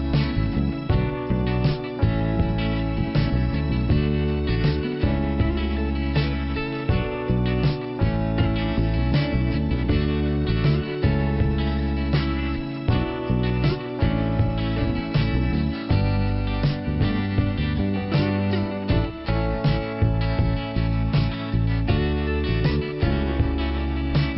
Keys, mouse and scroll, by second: 0.4 click, 0.6 click, 1.8 click, 3.9-4.5 scroll up 1, 4.7 scroll up 1, 7.9 click, 10.2 n, 11.1 middle click, 12.7 click, 17.8 click, 18.3-18.9 scroll down 1, 19.4 p.